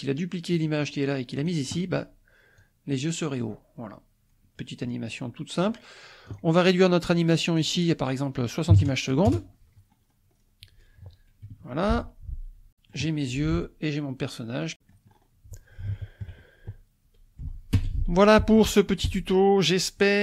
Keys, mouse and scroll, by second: 0.6 click, 1.4 click, 2.6-5.8 drag, 6.3 click, 7.6-8.7 drag, 8.7 KP_6, 8.8 KP_0, 9.3 Return, 10.0-10.3 scroll down 1, 11.4 space, 13.1 click, 14.3 scroll up 1, 14.4-17.2 drag, 17.2 scroll up 1, 18.0 shift+click, 18.9 middle click, 19.9 space.